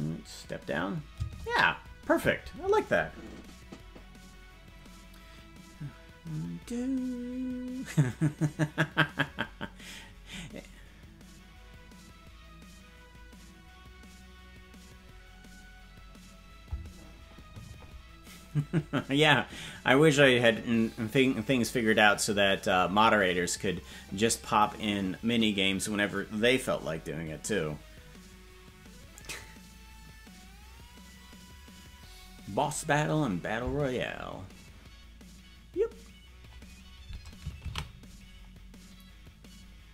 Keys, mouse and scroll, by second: 1.2 space.